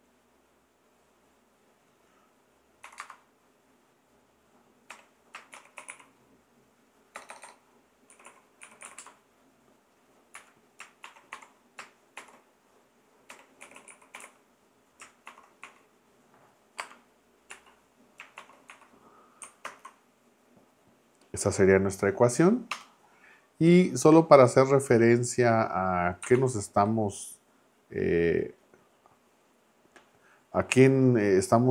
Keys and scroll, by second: 2.8 =, 3.0 space, 4.9-9.3 typing, 11.0-15.6 typing, 16.8 space, 17.5 x, 18.4 shift+-, 18.7 1, 19.6 ctrl+Return, 22.7 Return, 26.3 super+-.